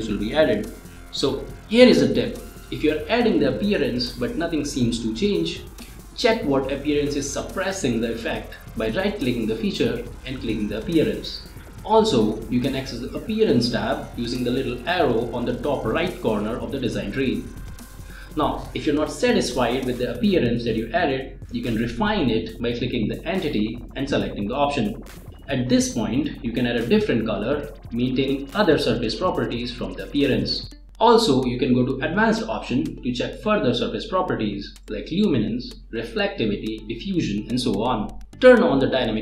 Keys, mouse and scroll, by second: 4.4 scroll up 1, 4.5-5.0 middle drag, 6.5 click, 8.0 click, 9.7 click, 12.2 click, 13.3 click, 18.4-20.2 drag, 21.4 click, 23.3 typing, 23.5 click, 25.5 click, 28.4-29.0 drag, 34.8 typing, 34.9 click.